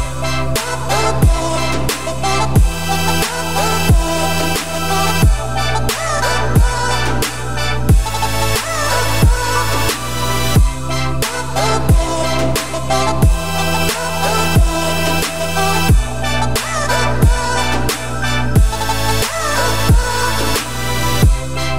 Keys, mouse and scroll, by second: 0.4 click, 0.7 middle drag, 0.9 Tab, 1.3 middle click, 1.7 scroll up 1, 1.8-2.1 scroll down 5, 2.1 `, 3.0 a, 3.3 `, 3.7 scroll down 3, 3.9 middle click, 4.1-5.0 scroll up 6, 5.0-6.9 middle drag, 6.9 alt+click, 7.5 alt+click, 8.9 x, 10.4 scroll down 6, 10.6 Tab, 10.9-11.6 middle drag, 11.6-12.0 scroll down 4, 12.0-12.9 middle drag, 12.9-13.6 scroll up 2, 13.6 click, 13.8 `, 14.3-14.6 middle drag, 14.6-15.0 scroll up 2, 15.0 shift+middle drag, 15.3-15.8 scroll up 2, 15.8 shift+click, 16.1-16.8 middle drag, 16.8 `, 17.5 shift+middle drag, 17.7-18.1 scroll up 4, 18.1-21.7 typing.